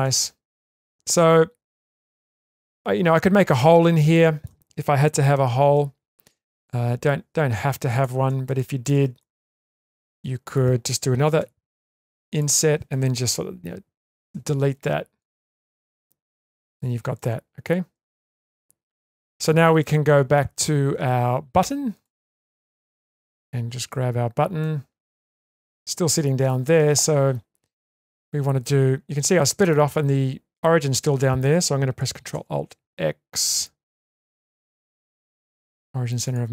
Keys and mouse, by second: 1.6 shift+middle click, 2.2 Tab, 2.7-3.6 middle drag, 4.1 middle click, 5.4 3, 7.9 click, 8.6 shift+middle click, 9.2-9.8 ctrl+middle drag, 10.2 shift+middle click, 11.4 i, 14.3 Delete, 15.7 middle click, 16.1 Tab, 17.1 middle click, 18.0 Tab, 19.1 middle click, 21.9 click, 22.7 click, 23.3 Tab, 24.6-25.5 middle drag, 26.2 middle drag, 28.0 middle click, 29.5 middle drag, 32.3 ctrl+alt+s, 34.8 ctrl+alt+x.